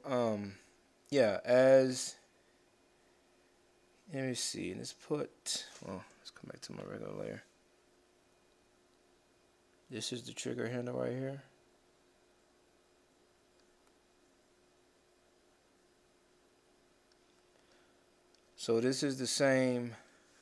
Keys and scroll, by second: 6.7 ctrl+shift+n.